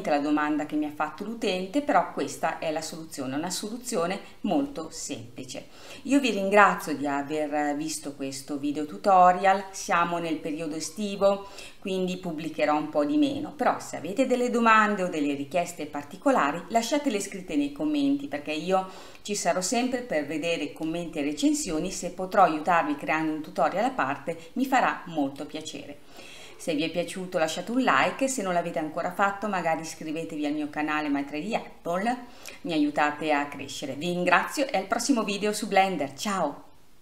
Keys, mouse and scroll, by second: 1.1-1.5 scroll down 1, 3.3-7.5 drag, 7.5-8.3 scroll down 2, 8.3-11.7 scroll up 1, 11.7-16.0 scroll up 1, 21.7-22.3 scroll up 1, 22.3 scroll up 1, 22.6-25.5 middle drag.